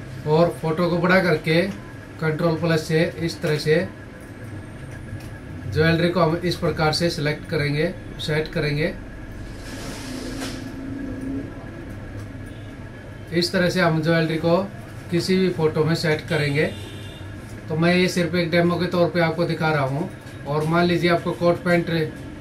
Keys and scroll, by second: 1.4 ctrl+=, 2.4 ctrl+t, 4.7 ctrl+t, 15.4 ctrl+-.